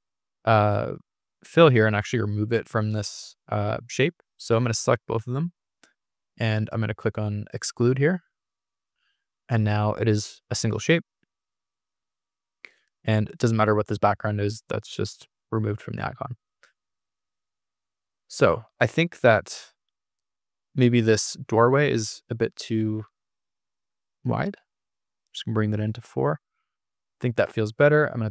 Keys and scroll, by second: 1.9 super+z, 17.1 super+-, 28.1 ctrl+r.